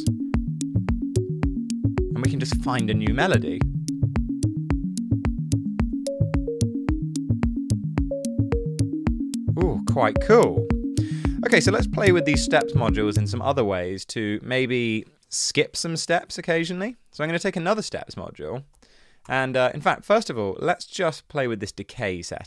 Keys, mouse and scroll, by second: 13.2 space, 18.4-19.2 typing, 19.3 Return.